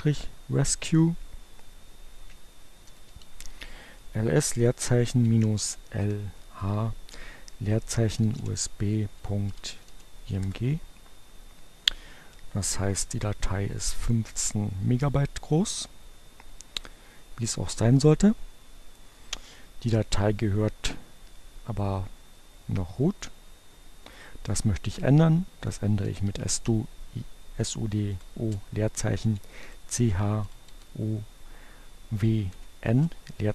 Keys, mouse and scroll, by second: 2.7-3.6 typing, 4.8-6.3 typing, 7.9-10.2 typing, 10.5 Return, 22.1-23.7 drag, 24.0 click, 25.6-26.7 typing, 27.8-30.0 typing, 31.5 n, 31.6 space.